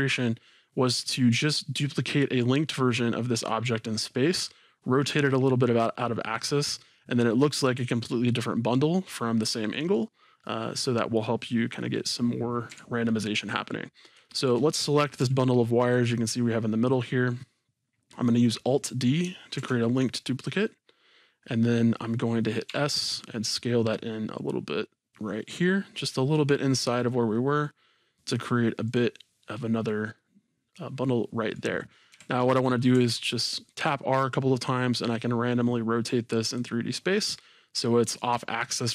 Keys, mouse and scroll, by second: 8.3-12.4 middle drag, 12.7 KP_1, 13.5-14.2 scroll up 2, 14.2-14.9 shift+middle drag, 15.2 g, 17.0-17.7 right drag, 19.6 alt+d, 29.0-30.1 drag, 30.1-32.1 middle drag, 32.9 r, 36.6 click, 37.3 scroll down 1.